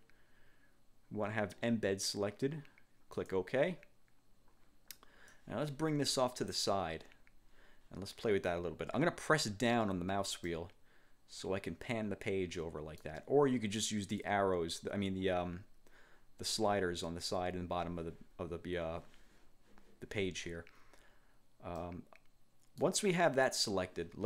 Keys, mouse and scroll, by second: 3.2 click, 5.4-6.8 drag, 10.6-12.6 middle drag, 12.6 click, 21.9-23.1 drag, 23.4 click.